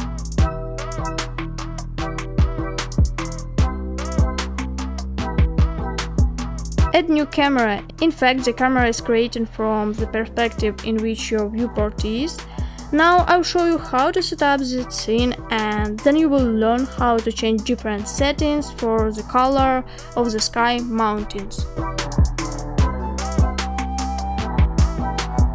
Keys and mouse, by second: 5.8 shift+a, 10.4 KP_7, 13.1 g, 17.0 KP_0, 19.0 g.